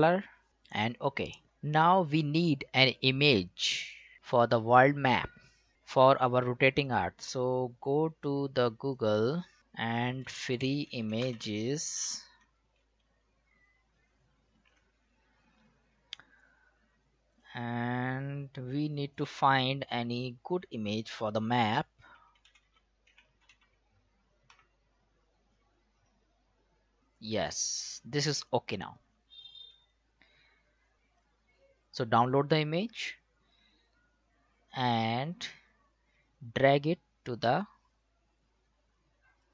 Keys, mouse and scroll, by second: 7.5 click, 10.0-11.9 typing, 14.7 click, 14.7 click, 16.8-17.2 scroll down 1, 17.3 click, 21.9-24.5 typing, 26.0 click, 27.0 scroll down 1, 27.2 click, 29.8 click, 35.7 click, 35.7-39.5 drag.